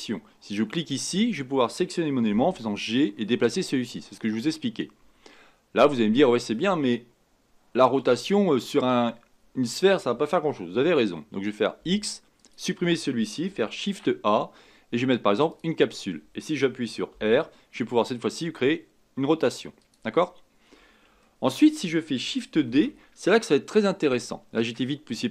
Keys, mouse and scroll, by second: 13.8 shift+a, 21.2-22.6 shift+middle drag, 22.6 shift+d.